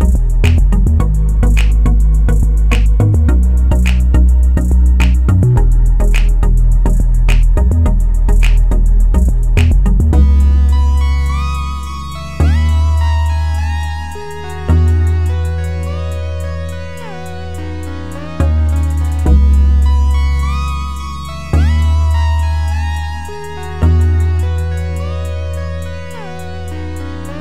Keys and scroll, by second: 4.5 9, 5.7 Return.